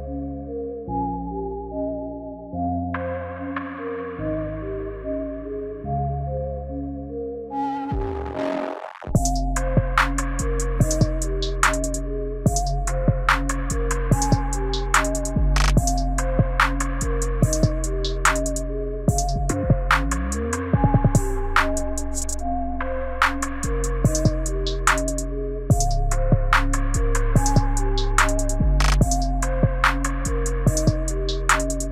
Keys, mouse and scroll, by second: 5.1 click, 5.1 i, 5.7 click, 7.5 x, 10.1 middle click, 11.3 click, 12.9 x, 14.4-15.1 scroll down 5, 15.1 middle click, 15.9 scroll down 1, 16.2 space, 21.6-24.7 typing, 24.8 click, 25.8 click, 27.4 g, 29.0 space.